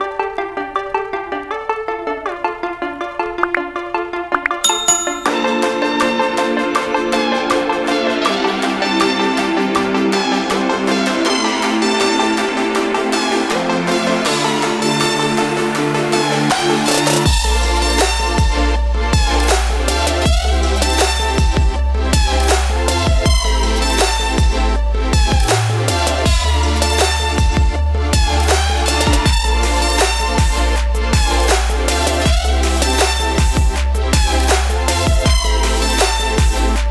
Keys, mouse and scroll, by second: 8.9-12.4 shift+drag, 8.9 typing, 13.3 ctrl+space, 13.4 ctrl+click, 14.0 space, 16.4 click, 18.9 ctrl+g, 21.0 click, 25.3 shift+click, 29.8 click, 32.0 shift+Down, 34.7 click, 34.9 ctrl+space, 35.1 ctrl+click, 35.3 ctrl+space, 35.9 click.